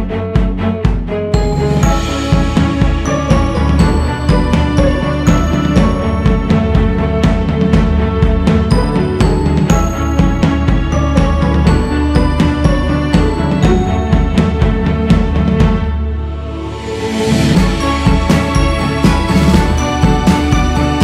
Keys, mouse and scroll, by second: 0.4 ctrl+z, 1.5-6.0 drag, 6.0-7.1 scroll down 4, 7.1-11.9 drag, 11.9-12.3 scroll up 3, 12.3 click, 13.1-13.6 scroll up 1, 13.6 q, 15.1 f, 17.8-20.9 drag, 20.9 ctrl+z.